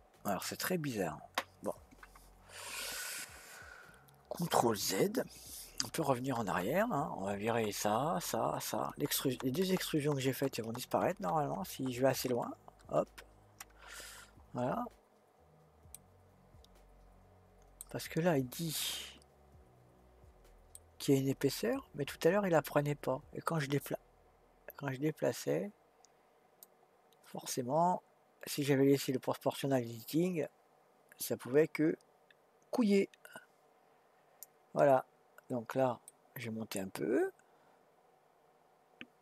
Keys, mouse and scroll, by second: 0.3 click, 5.8 ctrl+z, 6.2 ctrl+z, 6.4 ctrl+z, 7.4 ctrl+z, 8.1 ctrl+z, 8.5 ctrl+z, 8.9 ctrl+z, 9.2 ctrl+z, 9.6 ctrl+z, 9.9 ctrl+z, 10.2 ctrl+z, 10.5 ctrl+z, 10.8 ctrl+z, 11.1 ctrl+z, 11.3 ctrl+z, 11.6 ctrl+z, 11.9 ctrl+z, 12.7 ctrl+z, 16.0-19.0 middle drag, 19.6-20.4 scroll up 1, 20.4-20.7 scroll up 1, 20.7-23.8 middle drag, 26.6-27.7 drag, 34.9-36.1 scroll down 3, 36.1-39.1 middle drag.